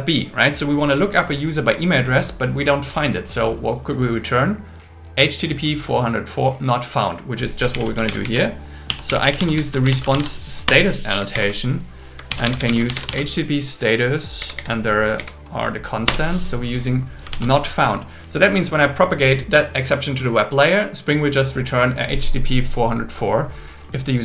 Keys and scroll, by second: 7.7 alt+l, 8.1 shift+r, 9.9 shift+s, 10.7 Return, 11.3-13.5 typing, 14.4 Down, 15.2 Down, 16.1 Return, 17.3 super+s.